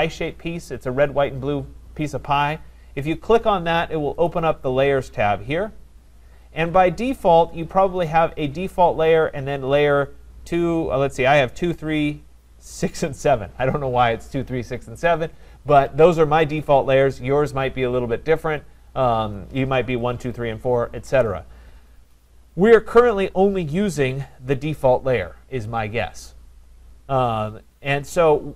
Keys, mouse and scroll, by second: 4.3-9.4 drag.